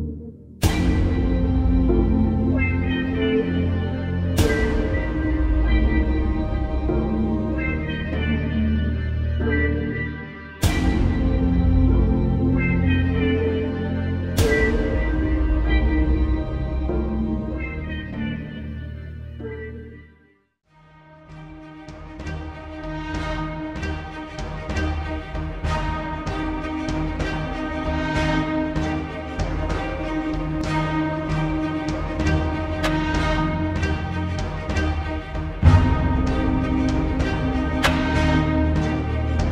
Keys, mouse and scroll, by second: 3.6-4.1 alt+scroll down 1, 4.4 alt+scroll up 1, 4.5 space, 4.6-5.2 click, 5.0 space, 6.0-9.7 drag, 21.2-25.5 alt+drag, 27.5 alt+scroll down 1, 27.8 space, 27.9-28.8 click, 28.3 space, 29.2 alt+scroll up 1, 29.6 space, 29.7 click, 30.1 space, 31.8 t, 32.4 click, 33.5-34.9 typing, 36.1-38.5 typing, 39.2 ctrl+a.